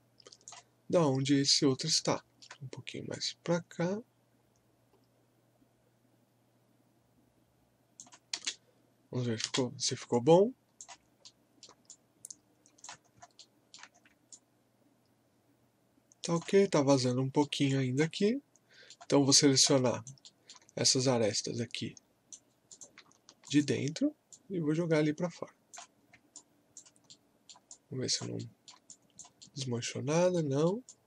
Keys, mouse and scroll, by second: 1.7 scroll up 1, 2.1 alt+middle click, 3.1-8.3 drag, 8.3 space, 10.1 alt+click, 11.3 alt+middle click, 11.9 alt+click, 13.1 scroll up 1, 13.4 alt+middle click, 14.0 scroll up 1, 14.3-16.6 alt+drag, 16.6 scroll up 1, 16.9 middle click, 17.0 alt+middle click, 17.8 alt+click, 18.2 alt+middle click, 19.4 alt+click, 19.8 alt+right click, 20.3 alt+middle click, 21.3-22.7 right drag, 22.7 click, 24.7-26.0 drag, 26.0 scroll down 1, 26.3 alt+click, 27.1 alt+middle click, 27.7 alt+click, 28.4 alt+middle click, 28.4 typing, 28.9 alt+click, 29.5 alt+middle click, 30.9 alt+click.